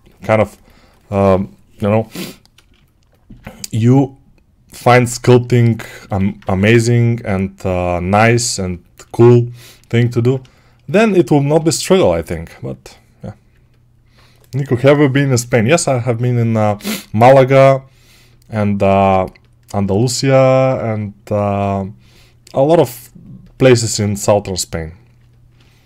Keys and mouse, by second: 4.8-25.8 ctrl+alt+right drag, 6.3 2, 11.4 g, 17.1 g.